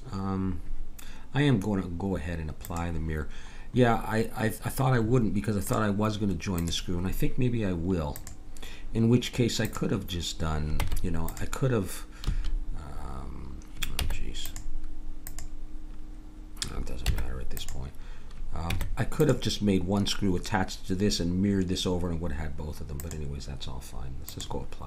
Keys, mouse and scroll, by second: 2.6-4.5 drag, 5.7-10.8 drag, 10.8 Tab, 12.3 a, 14.0 Tab, 17.0 Tab, 18.7 Tab, 23.0-24.8 drag.